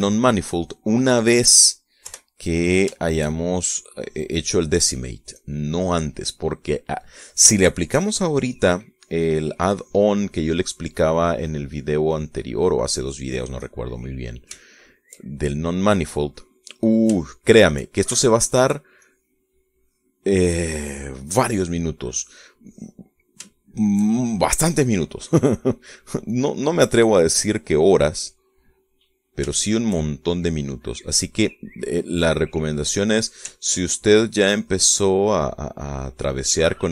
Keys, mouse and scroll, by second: 0.6 KP_Subtract, 2.2 middle click, 3.3 3, 3.6-5.0 middle drag, 5.2 shift+click, 5.7-7.4 drag, 7.5 click, 9.2 click, 10.2 click, 11.5 middle click, 12.6-13.8 drag, 15.8 shift+middle click, 16.8 middle click, 17.6 middle click, 18.5 shift+middle click, 19.5 shift+middle click, 20.3 shift+click, 21.0 click, 21.6 click, 22.1 click, 23.4 click, 23.9 click, 24.8 shift+middle click, 25.5-27.4 shift+middle drag, 27.6-28.8 drag, 28.9 click, 29.8 middle click, 30.8 shift+middle click, 31.4-33.5 shift+middle drag, 33.6 click, 34.7-36.4 ctrl+drag, 36.6 click.